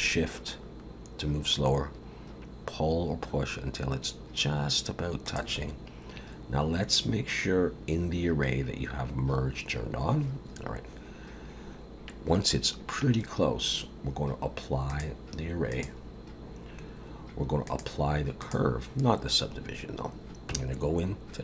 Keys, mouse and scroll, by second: 14.9 click, 17.7 click, 20.5 Tab, 21.0 scroll up 1.